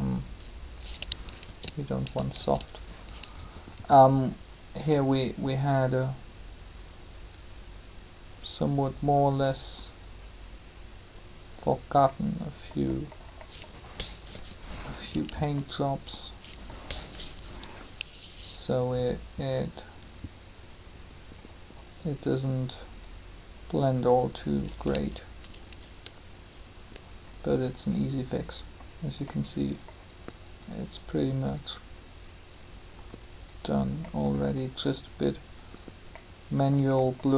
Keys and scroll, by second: 1.4 ctrl+z, 14.2 3, 17.1 3.